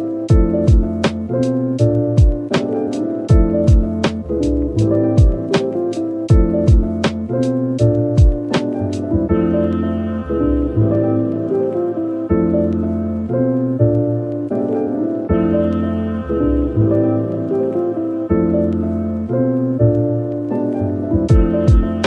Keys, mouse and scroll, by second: 5.3 s, 7.2-9.8 typing, 11.8 typing, 13.0 scroll up 1, 13.8 typing, 17.1-17.5 typing, 19.9-20.3 typing, 21.3-21.7 typing.